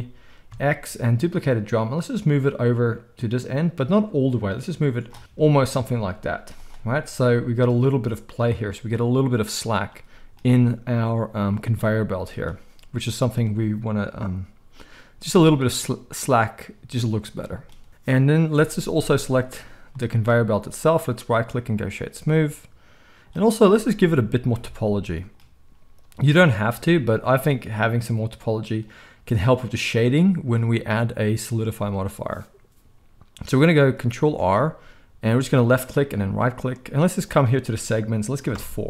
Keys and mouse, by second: 5.0-20.9 shift+middle drag, 5.2 z, 6.2 z, 20.9-36.3 right drag, 24.5 Tab, 34.3 ctrl+r, 36.3 middle click, 37.2-38.8 drag.